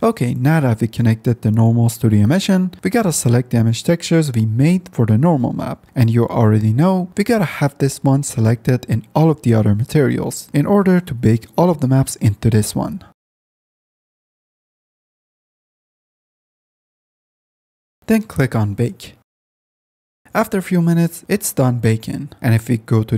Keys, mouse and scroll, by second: 4.6 click, 4.9-6.2 middle drag, 6.3 middle click, 6.9-7.6 middle drag, 10.2 click, 11.8 click, 12.5 click, 17.2 click, 19.7 click, 20.2 F10, 20.8 F10, 20.8 click.